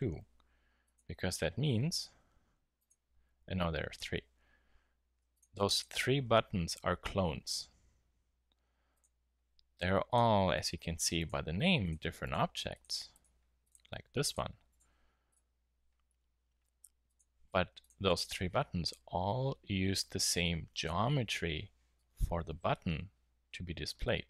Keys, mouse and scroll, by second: 1.8 alt+d.